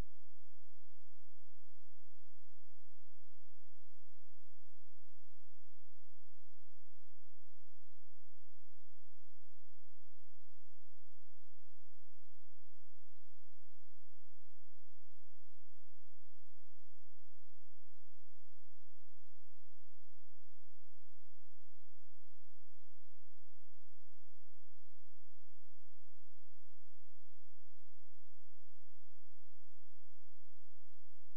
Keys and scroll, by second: 10.7 space, 12.0 ctrl+a, 12.9 shift+e, 13.5 ctrl+space.